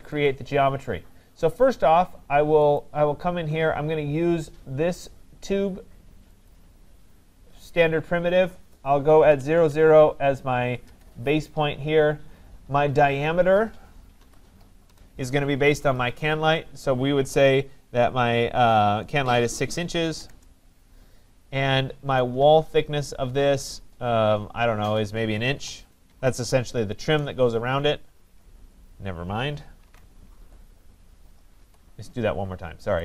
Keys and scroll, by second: 10.8 Return, 20.3 Return, 27.0 Return, 29.8 ctrl+z, 31.6 Escape.